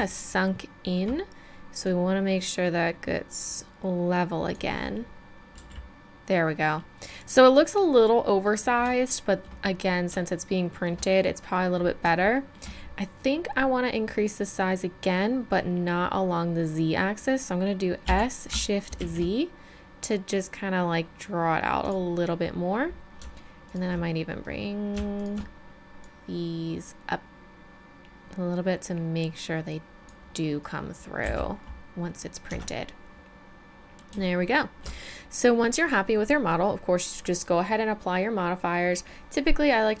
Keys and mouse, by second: 0.2 click, 1.9 middle click, 1.9 middle click, 4.8-5.9 middle drag, 5.6 z, 7.9-9.0 middle drag, 9.1 middle click, 9.3-12.2 middle drag, 12.4 middle click, 12.5 middle click, 18.1 s, 22.3-23.7 middle drag, 27.6-30.1 right drag, 31.2 a, 31.6 middle click, 32.5 Tab, 35.3-40.0 middle drag.